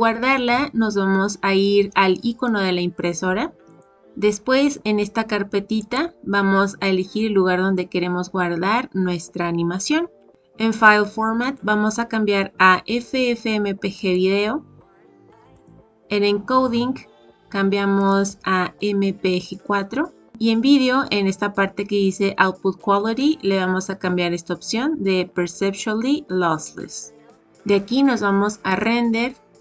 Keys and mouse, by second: 3.6 click, 5.7 click, 11.4-14.1 drag, 15.6 click, 17.9-19.7 drag, 23.1-27.2 drag, 28.6-29.6 drag.